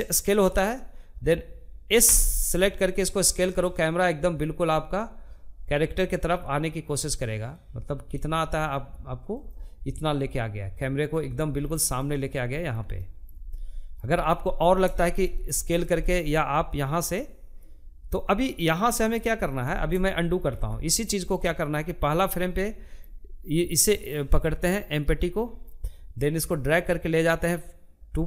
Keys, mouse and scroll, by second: 0.4 s, 8.4-10.0 middle drag, 10.0-10.4 scroll down 2, 10.4-17.9 middle drag, 17.9 scroll down 2, 18.1 shift+middle click, 18.9 ctrl+z, 21.0-24.0 middle drag, 24.6-28.2 drag.